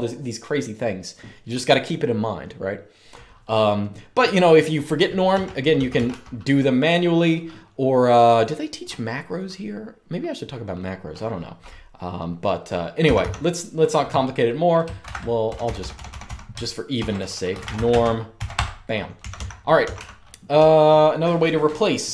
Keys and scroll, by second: 5.5-6.8 typing, 12.7 typing, 14.7-15.6 typing, 16.7-22.1 typing.